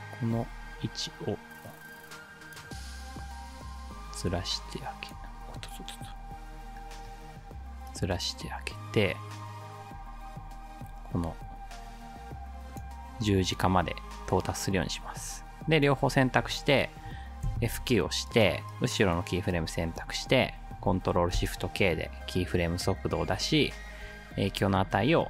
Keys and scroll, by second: 5.4 ctrl+z, 17.5 F9, 21.4 ctrl+shift+k.